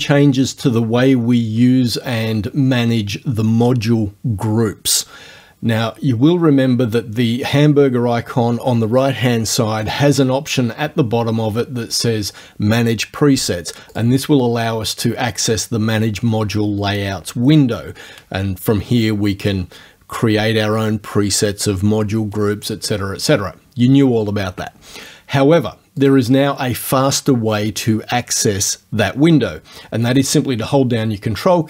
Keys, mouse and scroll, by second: 9.9 click, 14.0 click, 26.1 click.